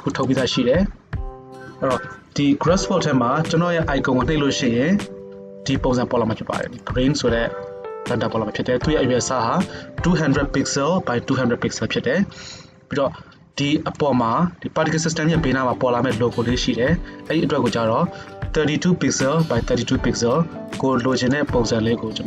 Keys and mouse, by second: 14.0-21.0 drag, 22.1 click.